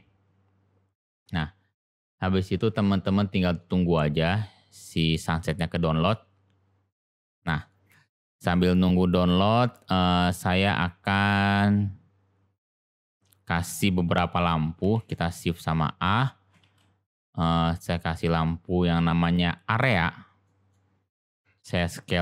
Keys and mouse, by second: 8.5 click, 8.9 click, 12.7-13.0 middle drag, 14.9 shift+a, 20.5 middle click.